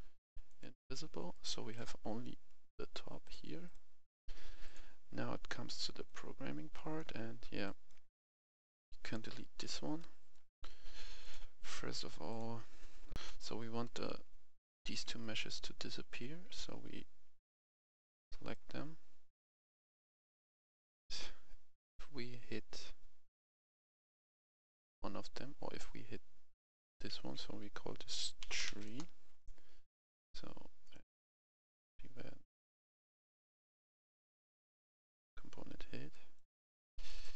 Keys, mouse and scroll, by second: 0.5 click, 1.3 right click, 1.5 s, 1.7 d, 2.0-3.2 scroll up 1, 3.2 click, 6.7 right click, 7.1-7.6 scroll down 1, 7.6 click, 9.6 Delete, 10.0 right click, 11.2 click, 13.1 F11, 14.9 click, 15.4 click, 16.5-18.6 shift+drag, 19.1-21.1 scroll up 1, 21.1 click, 23.5-24.4 scroll up 1, 24.4 click, 27.6 F2, 28.4-28.8 typing, 28.8 Return, 30.8 right click, 35.2 click, 36.1 right click, 36.6 click, 37.0 right click.